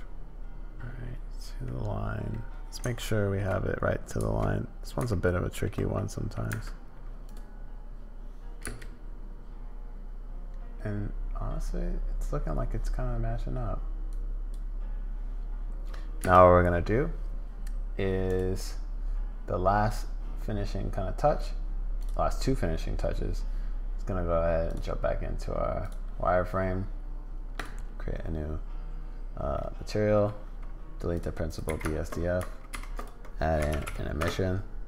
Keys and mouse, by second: 0.8 middle click, 2.3 middle click, 2.9 shift+middle click, 5.1 shift+click, 5.9 click, 6.5 Tab, 7.2 click, 8.6 space, 14.1 click, 16.3 space, 24.6 click, 25.9 click, 27.5 click, 29.7 click, 31.5 click, 31.7 x, 32.7 shift+a.